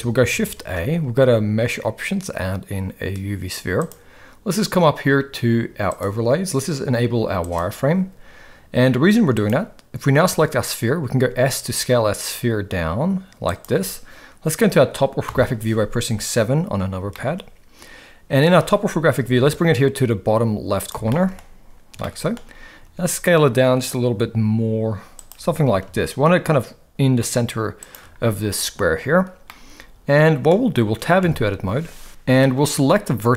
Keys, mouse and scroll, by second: 0.6 shift+a, 5.9-7.9 drag, 9.3 click, 11.1 s, 15.2 KP_7, 17.1 shift+scroll up 1, 17.3-18.4 shift+middle drag, 19.2 g, 21.1-21.4 shift+middle drag, 22.0-22.3 shift+middle drag, 22.8 s, 25.3 g, 29.6-30.6 middle drag, 31.2 Tab, 32.4 middle click.